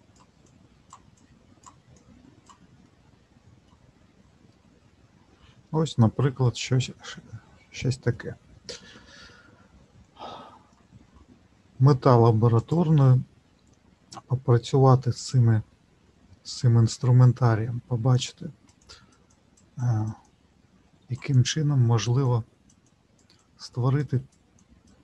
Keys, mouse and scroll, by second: 0.4 click, 1.9 click, 2.8 middle click, 4.1-4.5 scroll down 1, 4.5 middle click, 10.2-10.6 scroll up 1, 11.0-12.6 scroll up 9, 12.6-25.0 click.